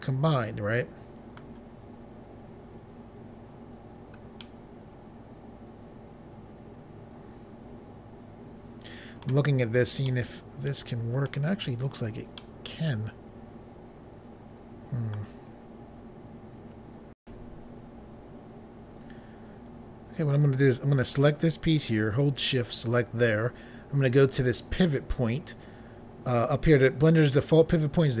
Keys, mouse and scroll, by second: 4.4 middle click, 10.1 scroll down 1, 10.3 middle click, 11.6 scroll up 1, 12.4 middle click, 18.4 Pause, 20.4 click, 22.6 shift+click, 24.7 click.